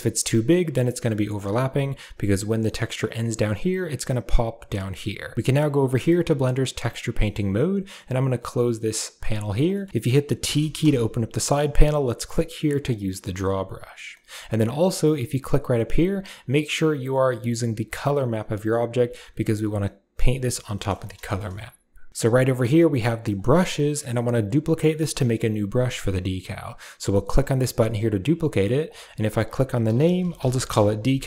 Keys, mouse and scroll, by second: 7.0 shift+middle click, 7.9-9.1 drag, 9.5 middle click, 9.8 shift+middle click, 10.6 t, 12.8 click, 15.3-18.8 drag, 19.6 middle click, 20.5 shift+middle click, 20.7 middle click, 21.0 shift+middle click, 23.1 click, 25.6 click, 28.7-30.5 drag.